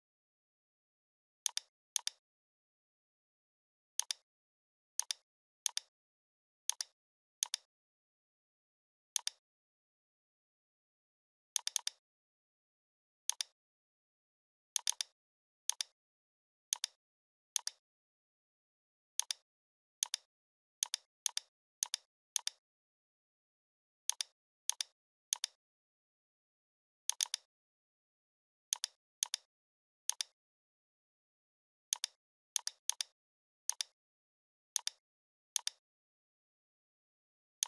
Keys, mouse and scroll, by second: 1.5 click, 2.9 right click, 4.0 click, 4.7 scroll down 1, 5.0 space, 5.0-5.4 click, 5.3 space, 5.7-6.1 click, 6.6 space, 6.7 click, 9.2 click, 10.3-11.5 scroll down 1, 11.6 click, 13.5-14.8 scroll up 1, 14.8 click, 17.6 click, 19.2 click, 24.1-25.8 drag, 31.9-36.7 drag.